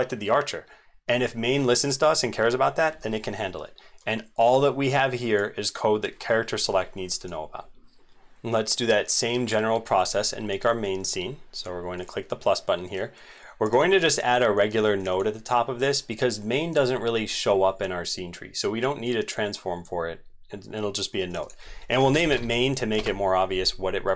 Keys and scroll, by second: 7.8 ctrl+s, 7.8 ctrl+shift+Tab.